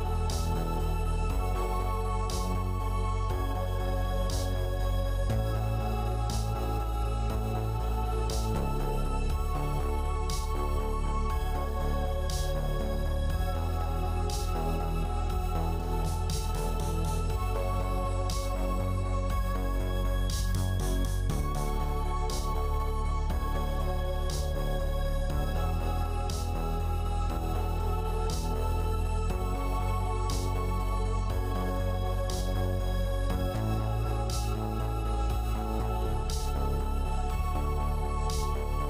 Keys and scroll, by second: 3.4 4, 4.8 3, 19.8-21.9 typing, 34.1 Tab.